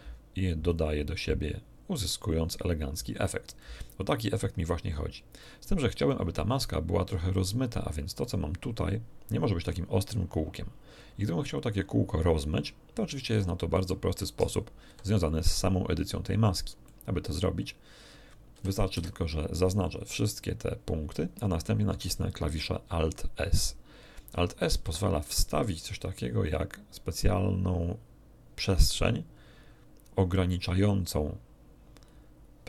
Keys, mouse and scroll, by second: 0.6 click, 3.6-5.6 drag, 6.0 click, 8.2-13.9 drag, 14.8 n, 16.1 scroll up 2, 16.8 shift+middle click, 18.6 a, 18.9 a, 24.7 alt+s.